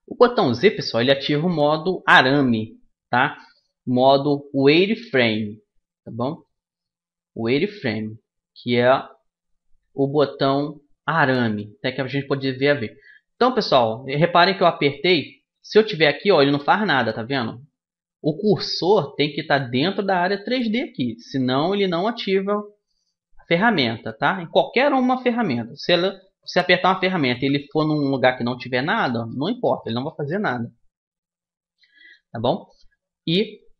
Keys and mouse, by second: 0.1 z, 6.6 z, 7.1 z, 8.5 z, 9.4 z, 10.5-14.3 middle drag, 14.3-16.9 typing, 20.7 z, 21.2 z, 21.7 z, 22.8 z, 26.2-29.9 typing.